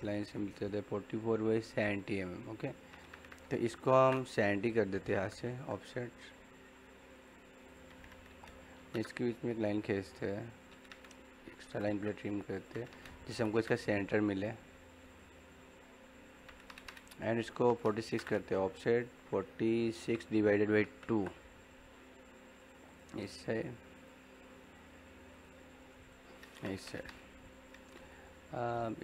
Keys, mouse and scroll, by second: 3.6 o, 3.9 space, 7.0 click, 8.7 l, 8.9 space, 11.3-11.7 typing, 12.4 click, 13.2 l, 13.6 space, 15.0 click, 17.6 o, 18.1 space, 22.6 click, 27.4 middle click, 27.9 click.